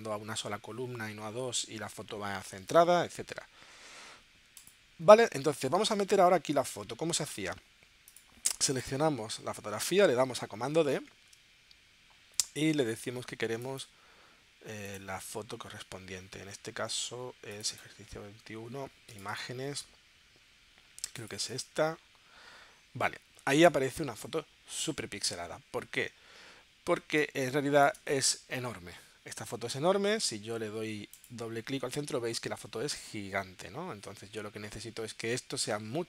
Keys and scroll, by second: 11.4 super+d, 27.2 space.